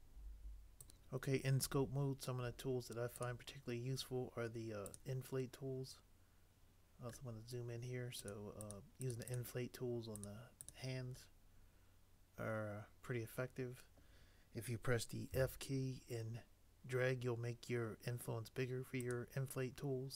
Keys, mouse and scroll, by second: 15.4 f.